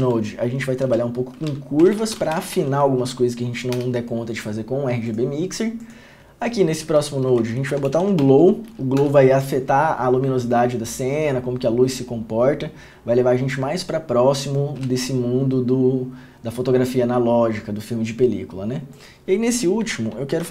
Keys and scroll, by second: 0.2 Return, 1.0-2.7 typing, 3.9 Return, 7.3 Return, 7.9 g, 8.2 o, 8.4 w, 9.1 Return, 19.9 Return, 20.4 Tab.